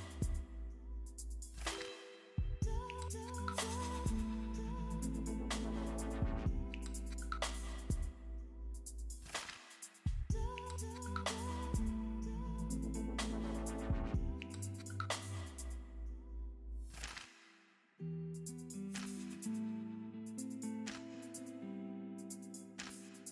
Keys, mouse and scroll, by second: 1.5-6.6 typing, 1.6 Return, 2.1 click, 3.1 Return, 3.7 Down, 3.7 Return, 5.5 Up, 6.7 Down, 6.8 Return, 8.0 Down, 8.2-9.6 typing, 8.8 Return, 10.7-15.6 typing, 11.1 Return, 12.5 Down, 12.7 Return, 14.5 Return, 14.7 Down, 16.0 Down, 16.2 Return, 16.8 click, 17.3 middle click, 17.6 click, 18.3 i, 18.5 n, 18.7 t, 18.8 e, 19.3 Return, 19.9 shift+., 20.6 Down, 21.0 Return, 22.1-23.3 drag.